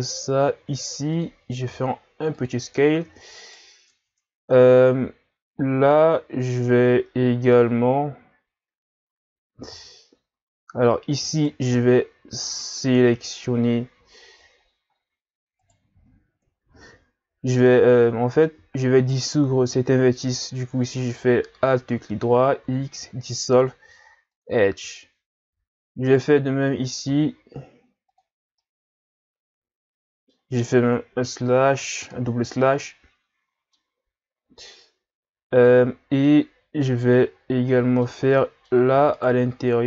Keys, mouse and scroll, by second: 1.6 s, 3.1 Tab, 3.4 right click, 3.9 Tab, 9.7 z, 11.3 right click, 11.7 c, 16.0 z, 17.0-18.2 scroll up 1, 18.2-19.0 scroll up 1, 19.0 alt+right click, 22.7 x, 26.1 alt+right click, 27.1 x, 28.6-31.2 middle drag, 31.2 KP_Divide, 31.5 KP_Divide, 32.9-36.6 middle drag, 36.6-37.4 scroll up 1, 37.4-37.7 scroll up 1, 37.7-39.1 middle drag, 39.1 alt+right click.